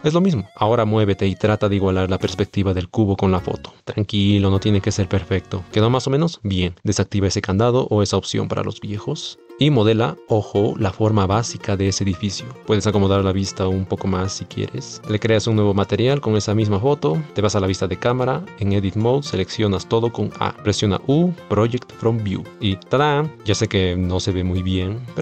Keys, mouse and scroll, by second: 0.6 shift+z, 0.8 shift+middle drag, 1.1 middle click, 1.6 middle click, 2.4 shift+middle click, 3.6 shift+middle click, 4.3 click, 4.4 shift+z, 4.7 shift+z, 4.7-5.5 middle drag, 7.4-7.9 drag, 9.5-12.6 typing, 10.6 middle click, 10.8 ctrl+KP_Add, 11.2 middle click, 11.5 shift+middle click, 12.8 middle click, 13.3 shift+middle click, 13.9 middle click, 14.2 shift+middle click, 15.0-16.1 drag, 16.1 middle click, 17.3 shift+z, 18.4 Tab, 19.3 a, 20.8 u, 22.9 Tab.